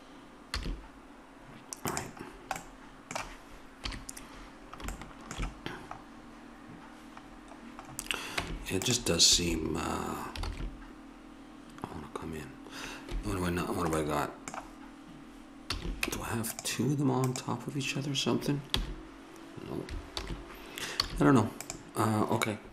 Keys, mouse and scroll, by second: 0.6 a, 2.0-3.8 drag, 4.0 KP_3, 7.1 middle click, 8.4 Tab, 9.3 a, 10.5 alt+s, 15.7 a, 16.1 Tab, 17.2 click, 18.7 h, 20.2 alt+h, 21.0 a, 21.8-22.7 right drag.